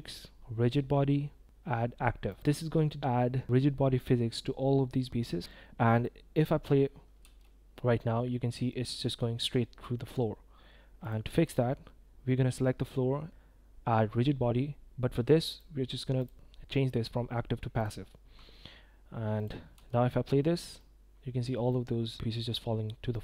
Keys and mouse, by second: 5.4 ctrl+z, 6.4 click, 7.2 space, 8.0-8.7 drag, 10.0 click, 16.2-17.8 drag, 19.3 click, 19.7 space, 20.8-21.5 middle drag, 21.7-22.1 middle drag, 23.1-23.2 middle drag.